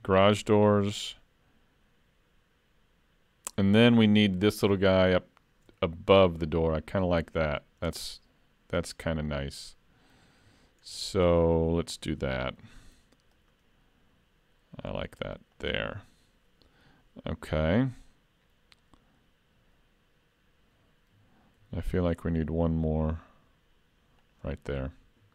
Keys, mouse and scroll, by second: 5.9 middle click, 9.6-10.3 scroll up 2, 10.5 shift+middle click, 11.0-11.5 scroll up 1, 11.5 scroll down 1, 11.5-12.0 scroll down 1, 12.4 ctrl+r, 21.6 ctrl+r.